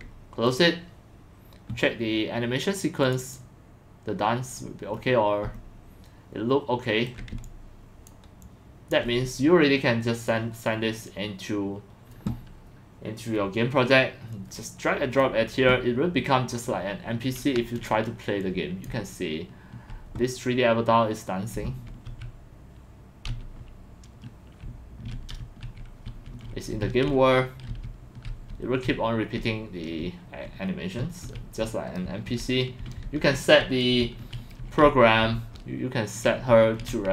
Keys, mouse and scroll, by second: 0.5 click, 3.3 click, 4.6 middle click, 4.6 middle click, 5.4-6.4 alt+middle drag, 7.1 alt+middle click, 7.4 alt+click, 8.4 alt+click, 10.2 click, 12.2-13.4 drag, 14.3 click, 17.7 click, 18.4 click, 18.9-20.0 w, 21.5 s, 21.9 a, 24.7-37.1 typing.